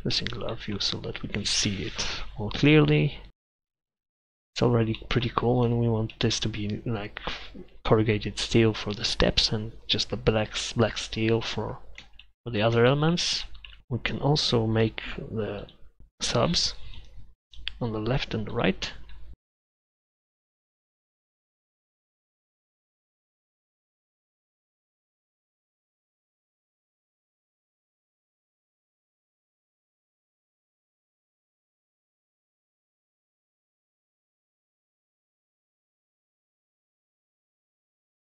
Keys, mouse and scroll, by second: 8.0 middle click, 16.0 middle click, 19.9 middle click, 29.6-31.3 middle drag, 31.4 middle click, 34.1 middle click.